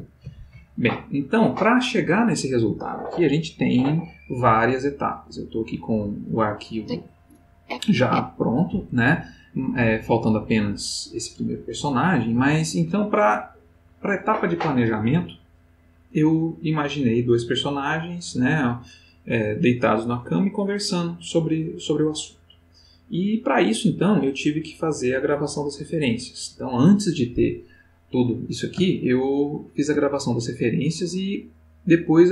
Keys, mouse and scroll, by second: 6.6-7.5 drag, 27.8-30.2 middle drag, 30.3-32.3 ctrl+middle drag.